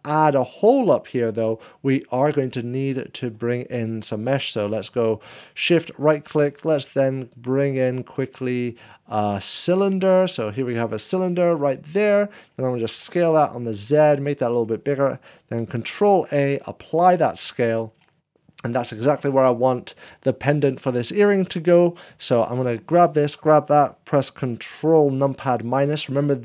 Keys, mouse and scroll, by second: 0.5 click, 7.7 shift+a, 8.6-18.4 drag, 10.2 shift+a, 11.5 middle click, 12.9 shift+a, 12.9 s, 13.2 z, 15.9 ctrl+a, 15.9 z, 17.2 s, 17.2 z, 17.3 middle click, 21.6 click, 23.2 shift+click, 25.3 ctrl+[, 25.3 s, 25.3 z, 26.3 ctrl+a, 26.3 click.